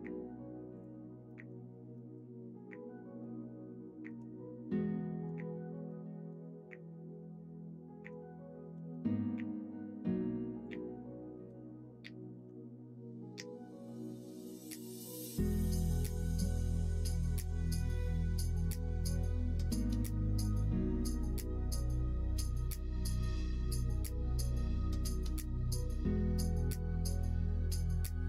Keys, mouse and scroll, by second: 1.2 middle click, 1.9 middle click, 3.1 middle click, 5.7 shift+d, 8.7 s, 11.3-15.2 drag, 11.4 e, 15.4 ctrl+z, 16.4 ctrl+z, 22.0 s, 23.9 middle click, 25.4 s.